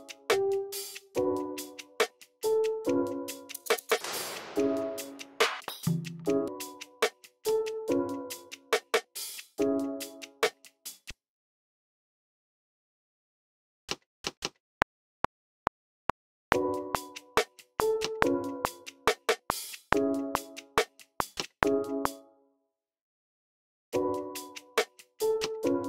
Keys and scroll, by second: 0.0 super+w, 1.1 x, 3.7 typing, 5.5-6.3 typing, 7.4 a, 7.9 a, 10.3-12.2 typing, 11.3 super+k, 13.4 super+k, 13.6-15.2 typing, 17.9 a, 18.4 a, 21.3-23.3 typing, 22.2 super+k, 22.5 super+a, 23.6 super+r, 25.0 alt+super+s.